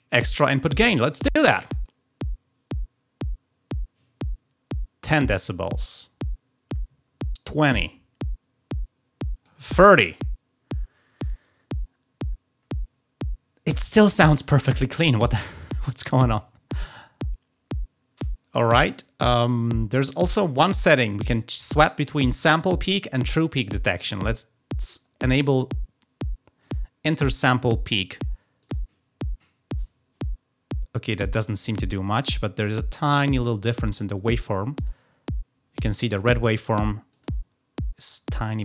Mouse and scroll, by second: 1.6-9.4 drag, 28.5 click, 34.7 click, 37.0 click.